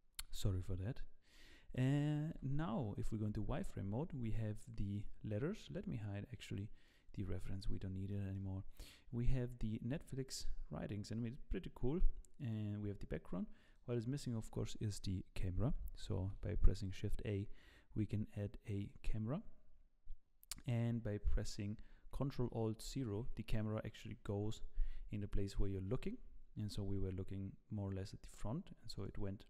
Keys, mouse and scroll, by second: 0.3-0.9 scroll up 1, 1.3 scroll up 2, 2.3 KP_1, 3.3 z, 3.7-4.3 scroll down 1, 4.3-4.9 scroll down 3, 4.9 click, 6.8 click, 7.3-7.9 scroll up 1, 7.9 scroll up 6, 8.1 shift+middle click, 10.0-10.8 scroll down 7, 11.1-11.6 scroll up 3, 11.6-12.4 scroll down 1, 12.4 click, 12.4 scroll down 1, 13.3-14.7 scroll up 5, 13.6 click, 15.5-16.0 scroll up 1, 16.2 shift+a, 22.8 ctrl+alt+KP_0, 24.8-25.8 scroll down 2, 25.9 g.